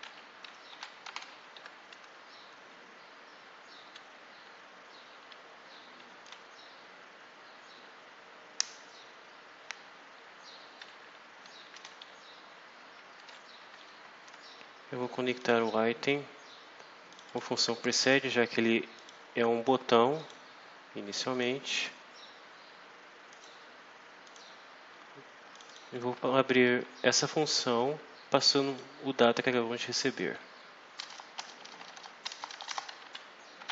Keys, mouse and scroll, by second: 0.0-1.6 typing, 2.7 BackSpace, 4.2 Down, 5.2 Up, 5.9 Down, 10.0 Up, 10.7 Down, 12.0 Down, 15.3 click, 17.0 click, 18.8 click, 20.0 click, 21.2 click, 23.2 click, 24.1 click, 25.4 click, 28.4 click, 29.8 click, 30.9 Return, 31.3 BackSpace, 32.2 Return, 32.8 Up, 33.2-33.7 typing.